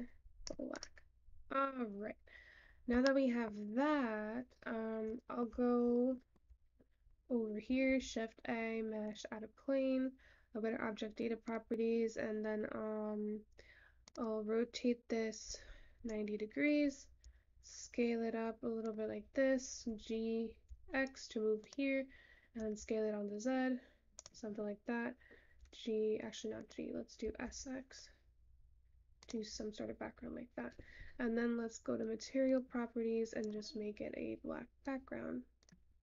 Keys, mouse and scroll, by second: 16.0-27.8 drag, 27.8 s, 32.3-33.6 scroll up 5, 33.6-35.1 scroll up 1, 35.1-36.0 scroll down 6.